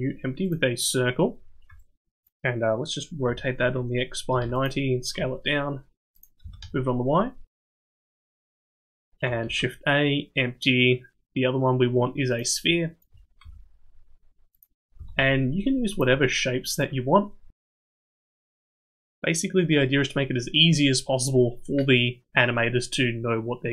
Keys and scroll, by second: 3.3 r, 5.2 s, 6.4 g, 8.1 s, 9.4 shift+a, 13.4 s, 15.0 g, 17.6 s.